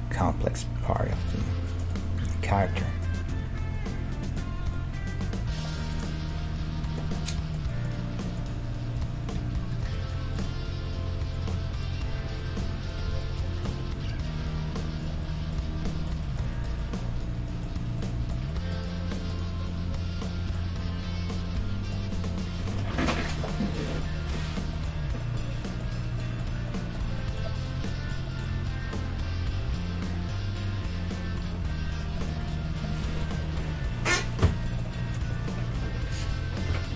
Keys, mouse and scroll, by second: 0.1 w, 2.3 ctrl+Tab, 3.3 a, 9.0-10.0 right drag, 9.4 g, 10.0 ctrl+Tab, 10.3 right click, 11.4-13.3 right drag, 12.1 f, 13.1 f, 13.7 ctrl+Tab, 14.4 g, 14.9 middle click, 15.9 middle click, 19.9-21.7 right drag, 20.7 g, 22.7-24.9 right drag, 23.4-30.2 middle drag, 27.6-29.9 right drag, 28.5 g, 31.9-34.4 middle drag, 33.2-36.9 right drag, 34.6-36.2 middle drag, 35.9 e.